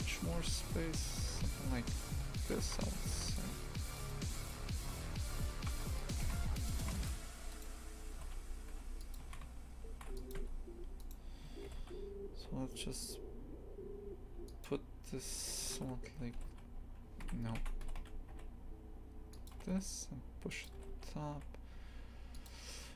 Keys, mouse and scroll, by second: 0.7 s, 2.6 shift+f, 3.4 2, 3.9 right click, 4.8 g, 6.2 shift+f, 7.5 right click, 8.1 g, 9.2 shift+f, 10.4 Tab, 11.0 right click, 11.7 g, 15.7 ctrl+z, 16.4 g, 17.5 shift+Tab, 17.8 g, 19.6 g.